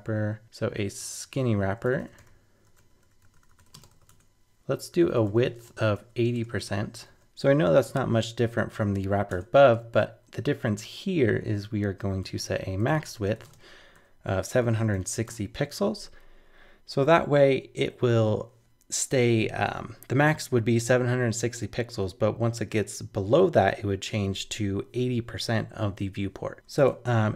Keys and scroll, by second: 7.2 shift+super+Left.